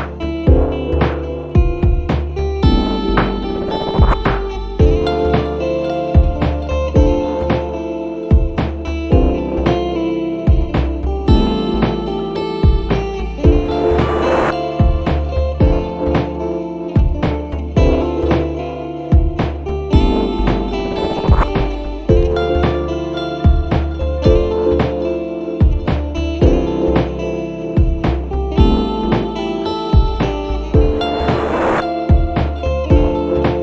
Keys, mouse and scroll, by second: 0.3 s, 1.5 click, 2.6 click, 5.4 s, 6.6 t, 7.1 e, 8.7 click, 9.5 click, 11.0 click, 12.2 click, 13.4 click, 13.8 s, 16.1 click, 18.2 click, 19.7 h, 20.0 e, 21.6 click, 22.9 click, 23.7 click, 26.1-27.1 drag, 27.9 click, 29.5 click, 30.6 click, 32.0 click, 33.1 s.